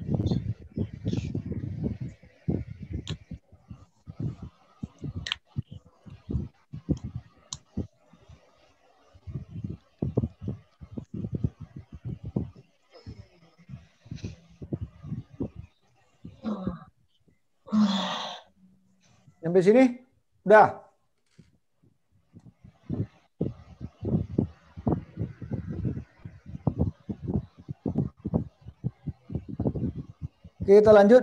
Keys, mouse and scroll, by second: 12.1-12.5 scroll up 4, 12.9-14.0 scroll down 5.